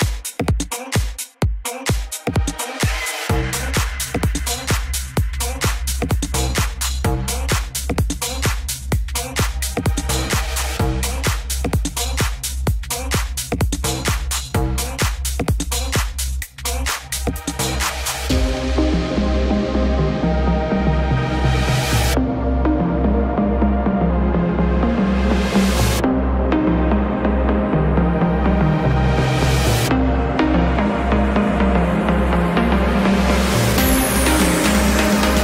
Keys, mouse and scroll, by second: 0.5 a, 0.6 c, 1.0 click, 1.7 a, 1.8 c, 2.2 click, 3.8 right click, 4.2 KP_3, 4.8 e, 8.9 ctrl+r, 9.6 middle click, 9.9 right click, 10.2 a, 10.8 click, 10.9 right click, 11.4 KP_3, 11.7 e, 13.1 KP_3, 13.9 e, 15.0 e, 16.2 e, 18.6 ctrl+r, 19.3 click, 19.5 middle click, 19.7 click, 20.5 click, 21.7 ctrl+r, 22.7 click, 23.3 right click, 23.5 click, 23.7 a, 24.2 click, 24.4 right click, 25.0 click, 25.0 a, 25.7 right click, 26.1 middle click, 26.3 click, 27.8 ctrl+r, 29.0 ctrl+r, 29.8 g, 30.5 click, 30.8 middle click, 31.2 click, 32.8 click, 33.2 middle click, 33.2 click, 33.8 click, 34.6 click, 35.1 click.